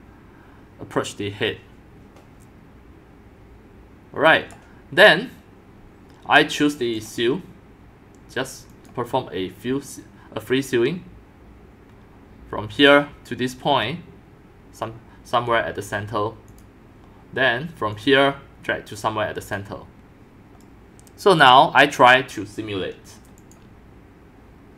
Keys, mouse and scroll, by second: 4.0 click, 7.0 click, 8.7 click, 9.3-12.1 drag, 12.8 click, 16.5 click, 17.9 click, 19.4 click, 23.4 click.